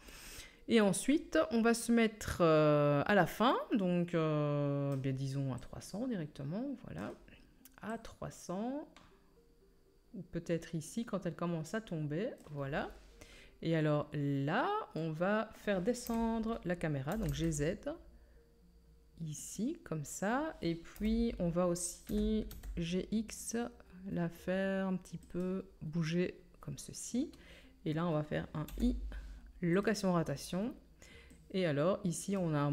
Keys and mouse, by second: 5.6-19.6 middle drag, 16.0 KP_3, 17.1 g, 19.6-32.7 drag, 20.9 KP_7, 22.0 g, 28.6 i, 31.3 middle click, 31.3 right click.